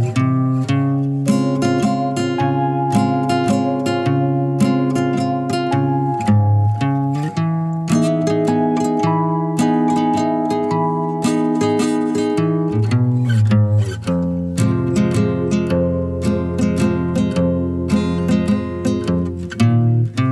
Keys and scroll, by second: 0.0-7.5 typing.